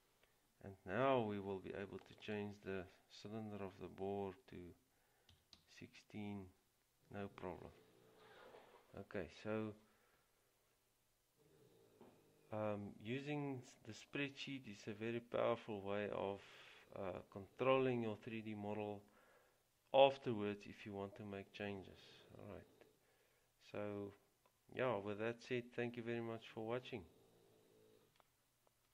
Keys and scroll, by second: 5.2-6.2 typing.